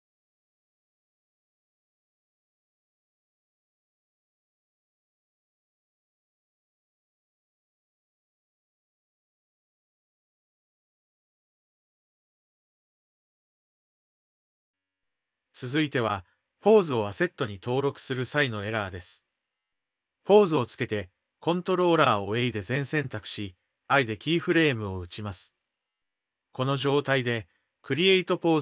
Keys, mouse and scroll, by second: 0.0 middle click, 0.5 shift+click, 0.7 click, 1.3 click, 2.0 ctrl+l, 2.2 click, 2.8 g, 3.4-4.5 drag, 4.7 Tab, 5.4 d, 5.4 click, 5.8 click, 6.6 click, 7.7 click, 7.9 Tab, 8.1 shift+middle click, 8.7 click, 9.0 click, 9.1 s, 9.8 drag, 10.1 s, 10.6 click, 10.7 s, 11.3 s, 12.0 click, 12.2-14.7 middle drag, 15.2 middle click, 15.6 Tab, 16.4 click, 17.9 g, 18.9 click, 19.2 g, 20.4 middle click, 21.1 click, 21.5 r, 21.6 r, 22.3-23.6 drag, 23.6 a, 25.2 i, 26.7-27.7 drag.